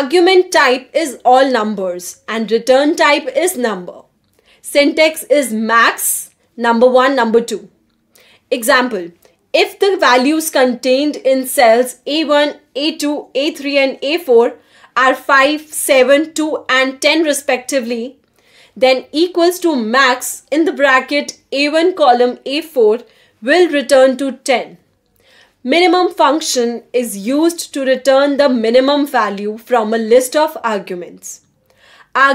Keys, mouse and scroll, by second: 13.5 click, 14.9-16.1 typing, 16.2 Return, 17.4 Return, 24.4-26.3 drag, 26.3-27.1 typing.